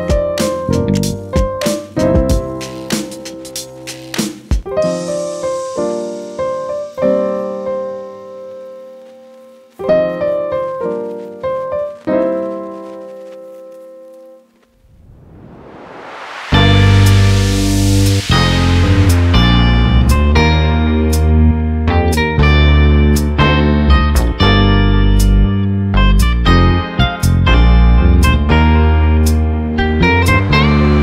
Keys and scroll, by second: 14.4 ctrl+z, 19.0 ctrl+t, 25.4 Return.